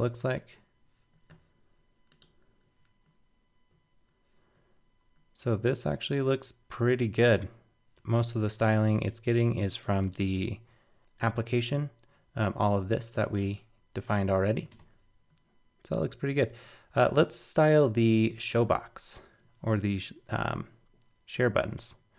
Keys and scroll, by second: 10.2 super+Tab.